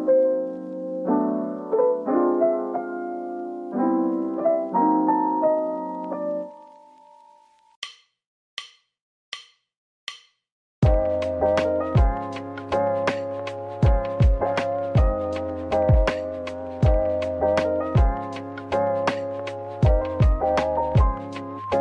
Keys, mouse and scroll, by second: 0.0-1.0 typing, 2.1 middle click, 4.1 ctrl+b, 6.4-7.4 typing, 7.8 right click, 8.1 middle click, 8.9 scroll up 1, 9.2 middle click, 10.5-11.5 scroll down 1, 11.5 middle click, 15.3 a, 18.3 middle click, 19.7 /, 20.5 middle click.